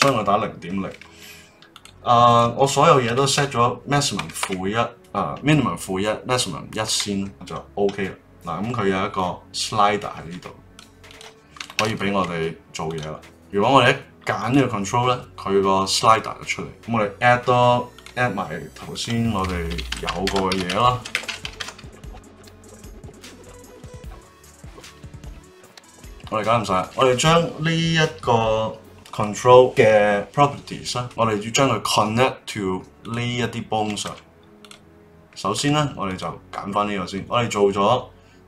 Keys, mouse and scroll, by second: 9.1-12.9 drag, 14.4 click, 16.7 click, 17.9-20.0 drag, 20.0 e, 21.4 e, 22.2 click, 22.7 click, 23.2 click, 23.9 click, 24.2 click, 24.7 o, 24.9 l, 25.8 click, 29.1 click, 33.0 click, 34.0 Tab, 34.6 click, 35.2 click, 35.5 Tab, 36.0 click.